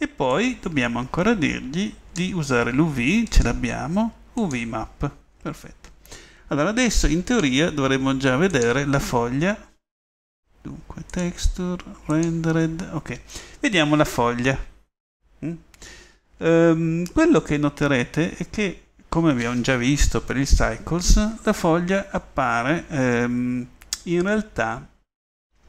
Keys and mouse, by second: 1.6 middle click, 3.8 click, 5.9-7.0 middle drag, 10.3-11.2 middle drag.